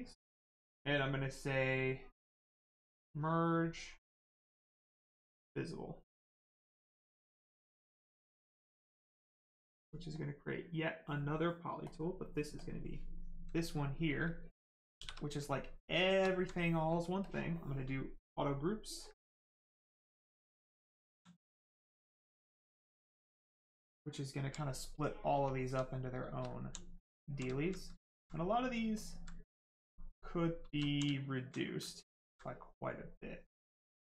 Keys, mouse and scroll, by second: 2.5 click, 6.4 click, 10.1 click, 12.6 click, 13.2 right click, 15.0 shift+f, 15.3 right click, 16.0 shift+right click, 16.3 alt+right click, 17.2 click, 18.0 right click, 21.0 alt+right click, 21.5 right click, 24.0 alt+right click, 24.8 right click, 25.6 alt+right click, 26.0 right click, 26.1 right click, 26.2 shift+right click, 26.6 alt+right click, 27.0 alt+right click, 28.3 right click, 28.4 right click, 29.0 alt+click, 29.4 right click, 30.6 shift+right click, 30.8 alt+right click.